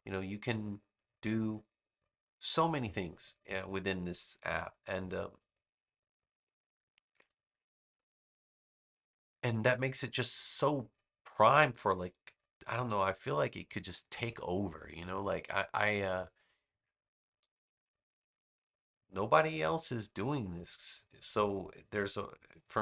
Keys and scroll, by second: 7.0 a, 21.7 a.